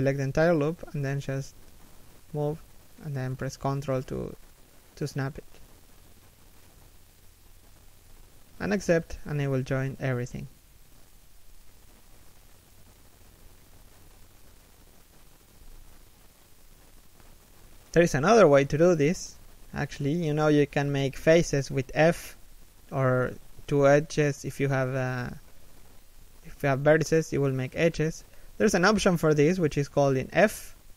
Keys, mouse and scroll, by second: 3.8 g, 9.0 z, 9.3 middle click, 11.9 3, 12.5 1, 12.9 z, 13.2-17.5 scroll down 1, 17.8-19.0 scroll up 1, 19.0 alt+shift+right click, 26.4 f.